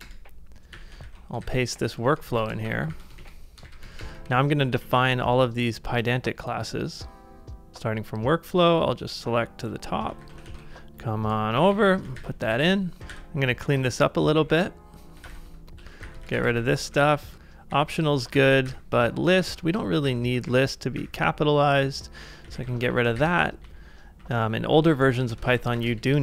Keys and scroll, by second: 0.0 Return, 0.7 i, 1.0 super+v, 1.5 ctrl+c, 2.3 shift+v, 2.7 shift+[, 4.2 ctrl+Right, 4.2 super+Tab, 4.7 super+Tab, 10.2 super+c, 10.4 super+Tab, 11.6 Up, 11.7 Up, 11.8 Up, 12.1 super+v, 12.6 ctrl+c, 12.7-25.7 typing, 25.5 ctrl+c, 25.9 Return.